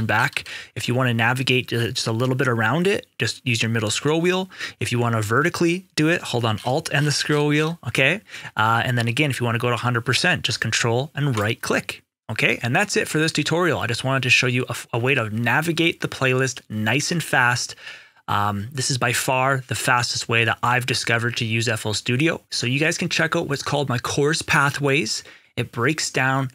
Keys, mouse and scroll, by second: 0.3 ctrl+scroll up 1, 1.6 scroll up 1, 1.7 middle click, 6.4 alt+scroll down 1, 11.2 ctrl+right click.